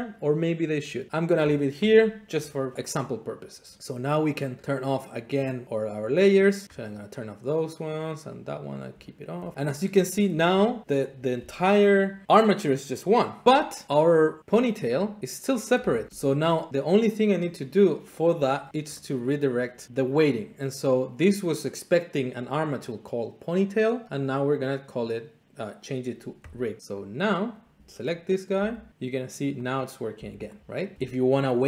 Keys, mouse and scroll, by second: 1.1 middle click, 4.2 click, 5.9 click, 6.6 middle click, 6.8 click, 7.3 middle click, 8.3 click, 8.6 click, 9.3 shift+middle click, 9.5 middle click, 10.3 Tab, 11.1 click, 13.8 click, 14.4 click, 14.5 Tab, 15.6 click, 15.8 r, 16.1 Escape, 16.1 Tab, 16.7 click, 17.4 click, 18.1-19.2 middle drag, 19.5 click, 22.7-23.8 drag, 26.6 click, 27.4 click, 27.8 Tab, 28.5 r, 29.7 click, 30.1 r, 30.6 click.